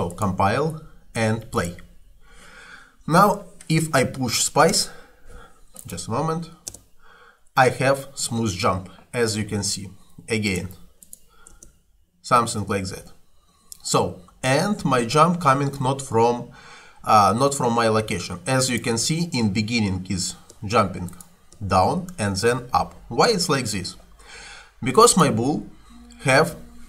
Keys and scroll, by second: 4.8 space, 6.7 space, 9.4 Escape, 11.6 space, 12.7 Escape, 20.6 space, 22.6 Escape.